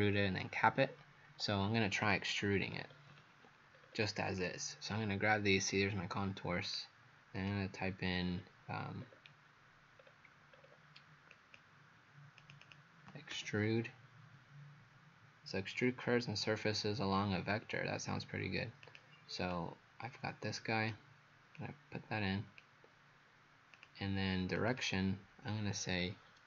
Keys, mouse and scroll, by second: 2.7-3.1 scroll down 3, 3.8 scroll up 2, 4.4 click, 4.4 scroll up 1, 8.2 scroll up 2, 9.0 scroll down 1, 9.1 scroll down 1, 10.0-10.6 scroll down 2, 10.6 scroll up 2, 11.4 click, 12.6 click, 13.4-13.7 typing, 18.9 click, 19.5 click, 21.6 click, 24.8 click, 26.3-26.4 typing.